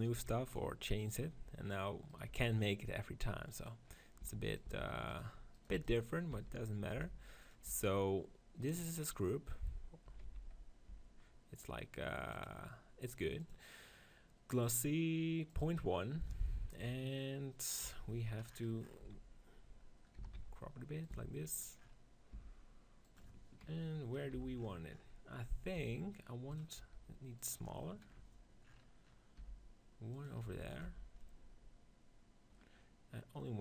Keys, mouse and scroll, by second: 0.0 b, 1.0 middle click, 2.3 b, 4.1 e, 4.7 s, 6.2 e, 6.9 s, 7.5 Tab, 9.9 Tab, 10.2 z, 10.8 Tab, 12.3-16.8 drag, 16.7 KP_7, 17.7 KP_1, 18.0 z, 18.9 z, 20.2 s, 21.1 s, 21.5-23.7 drag, 22.3 g, 24.2 z, 24.9-26.4 middle drag, 25.8 g, 26.4 click, 26.6 s, 29.2 g, 30.1-32.5 drag, 30.1 s, 30.7 z, 33.5-33.6 drag.